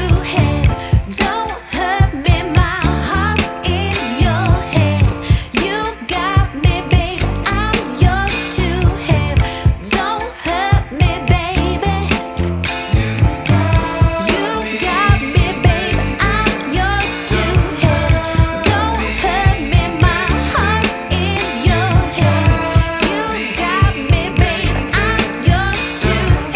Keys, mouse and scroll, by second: 0.2 click, 2.7 scroll up 1, 2.9 scroll down 1, 3.8 click, 14.0 scroll down 1, 14.3-14.8 scroll up 3, 14.8 scroll down 1, 15.4-16.1 scroll down 1, 17.2 click, 17.9 scroll down 1, 18.0 scroll up 1, 18.3 scroll down 1, 18.3 scroll up 1, 18.6 scroll down 1, 18.9 scroll up 1, 19.0-21.2 scroll down 3, 23.1 F10, 25.1 click, 25.9 click.